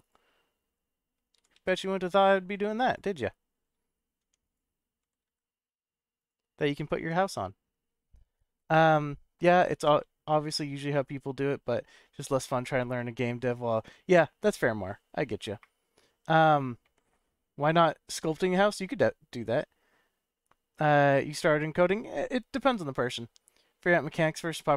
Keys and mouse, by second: 0.0 click, 0.7 KP_1, 1.3 g, 1.5 z, 2.8 click, 4.2 Tab, 4.4 click, 4.9 g, 5.2 z, 6.1 click, 6.7-8.0 middle drag, 18.7-19.7 middle drag.